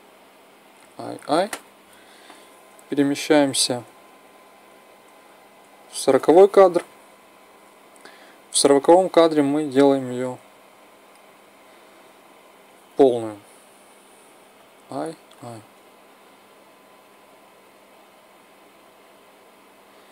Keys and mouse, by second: 0.4 i, 0.8 i, 2.2 Right, 2.9 Right, 3.2 Right, 3.5 Right, 3.7 Right, 3.9 Right, 4.4 Right, 4.7 Right, 4.9 Right, 5.3 Right, 9.4-11.3 drag, 14.2 i, 14.7 i, 16.8-18.7 drag.